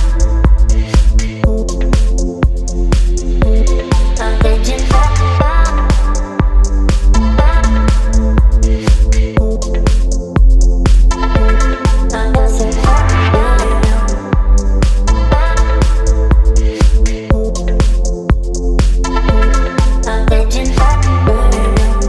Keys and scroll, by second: 9.2 BackSpace, 12.1 v, 14.3 ctrl+t, 21.4 Return.